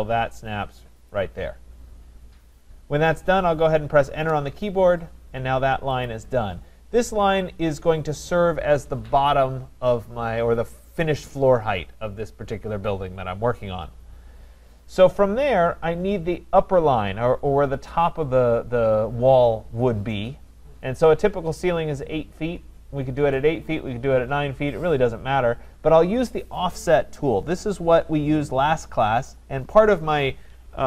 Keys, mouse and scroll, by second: 1.1 click, 4.2 Return, 6.0 click.